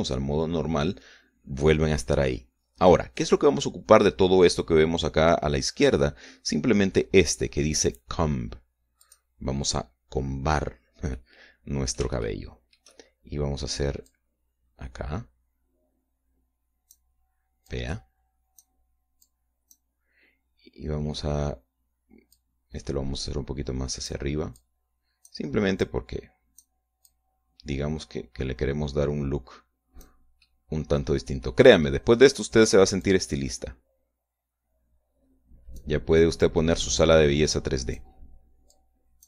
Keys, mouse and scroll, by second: 9.9 click, 12.0-13.0 middle drag, 14.9-18.0 drag, 18.5-19.7 drag, 20.1 click, 23.2-25.1 drag, 25.5 click, 26.7-27.7 drag, 27.9-31.1 drag, 31.3-32.5 middle drag, 32.7 middle click, 33.9-36.9 drag, 37.3-39.0 drag.